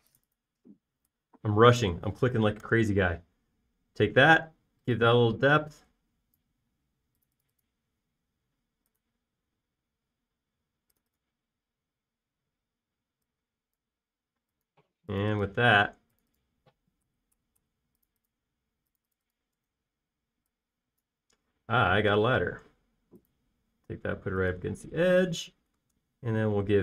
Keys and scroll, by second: 3.9 BackSpace, 5.3 p, 7.8 space, 15.6 space, 18.0 Escape, 18.3 Escape, 18.6 Escape, 22.9 m.